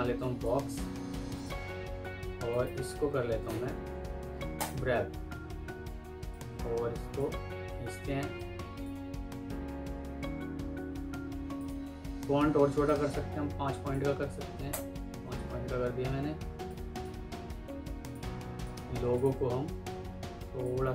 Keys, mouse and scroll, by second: 2.4 right click, 9.8 F3, 10.5 F3, 14.3 typing, 14.6 Return, 16.2 F2, 17.0 Escape, 19.0 alt+click.